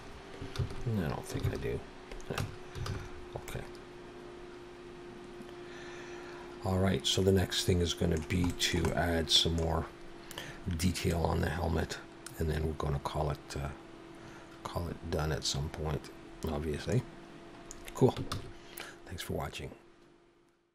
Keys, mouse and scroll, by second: 0.6 ctrl+z, 1.5 ctrl+z, 2.4 Tab, 2.9 alt+a, 3.0-4.4 scroll down 3, 3.5 middle click, 8.5 shift+middle click, 11.1 middle click, 17.1 scroll down 1, 18.4 ctrl+s.